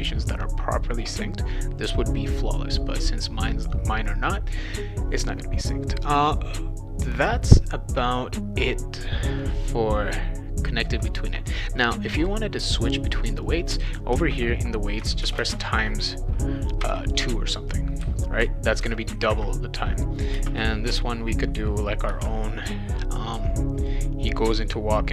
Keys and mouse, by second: 13.4 click, 14.1 space, 15.2 shift+8, 15.4 space, 16.8 2, 20.4 space, 22.1 shift+8, 22.2 space, 24.9-25.1 typing.